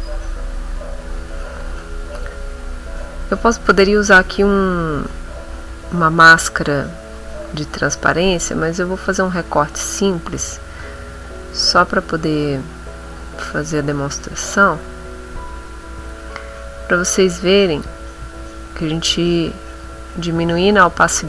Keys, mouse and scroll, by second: 2.1 click, 6.7-10.2 drag, 10.6 ctrl+middle click, 11.0 ctrl+x, 12.2 ctrl+shift+a, 14.7-18.0 drag, 19.8 ctrl+x, 20.9 ctrl+shift+a.